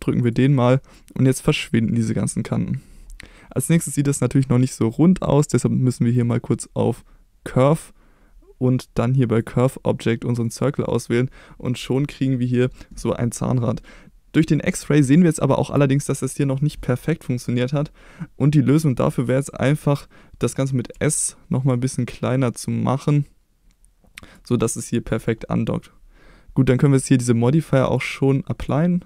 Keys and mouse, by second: 0.2 click, 6.3-7.8 drag, 15.2-15.7 shift+middle drag, 20.9 s, 24.2 click, 27.8-28.7 drag.